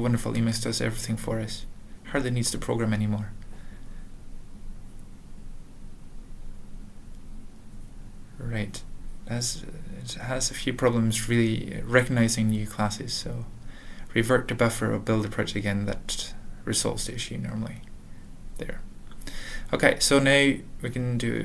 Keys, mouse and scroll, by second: 0.3 ctrl+s, 1.0 ctrl+n, 3.9 alt+f, 4.3 alt+f, 4.5 alt+b, 4.9 alt+., 5.6 alt+,, 6.3 ctrl+a, 6.6 ctrl+s, 11.5 alt+x, 11.7-13.6 typing, 14.6 ctrl+g, 15.5 alt+,, 17.5 F5, 18.7 alt+,, 19.5 alt+b, 19.7 alt+b, 20.2 alt+b, 21.1 alt+Return.